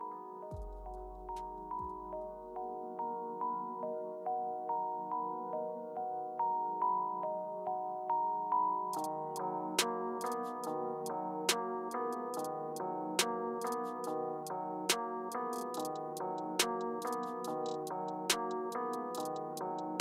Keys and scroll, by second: 2.9 typing, 6.5 Right, 14.7 Return, 17.9 Return.